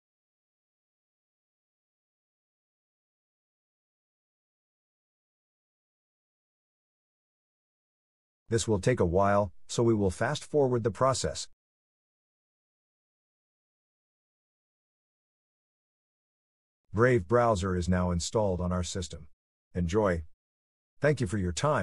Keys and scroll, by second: 3.8 Return, 5.8 Return, 8.4 Return.